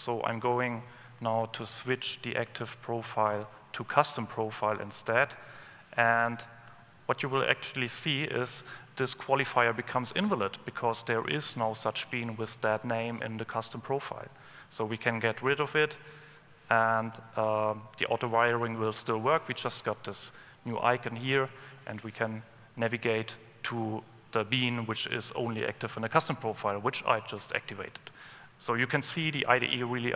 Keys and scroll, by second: 15.6 alt+Up.